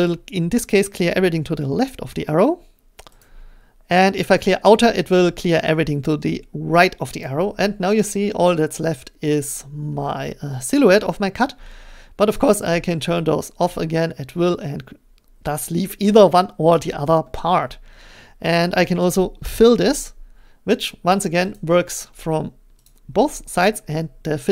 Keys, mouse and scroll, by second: 3.2 click, 7.2 click, 8.6 click, 9.2 click, 10.1-11.1 drag, 11.1-12.5 middle drag, 12.5-15.0 drag, 17.2 middle click, 19.6-21.5 drag, 22.8 click, 23.7-24.5 scroll.